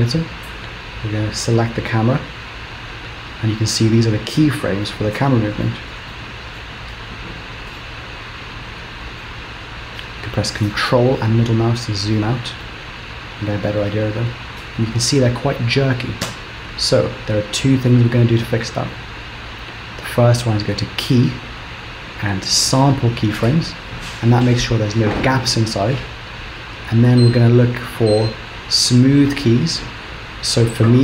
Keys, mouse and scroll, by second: 1.7 click, 2.7-4.6 scroll down 13, 4.8 shift+middle click, 6.1 shift+middle click, 6.9 middle click, 9.2 ctrl+middle click, 10.7 ctrl+middle click, 12.6 middle click, 14.2 space, 16.3 space, 19.9 click, 26.9 click.